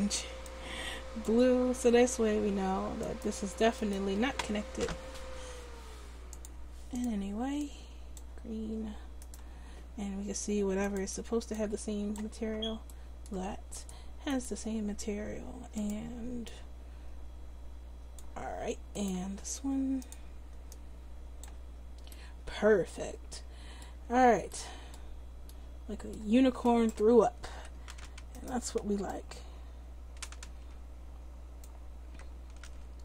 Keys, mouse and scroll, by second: 2.5 Tab, 6.3-9.3 drag, 10.8-12.9 drag, 10.8-12.9 right drag, 13.8-18.3 drag, 13.8-16.2 right drag, 19.0-20.6 right drag, 20.0 click, 27.5 Tab, 32.6 ctrl+z.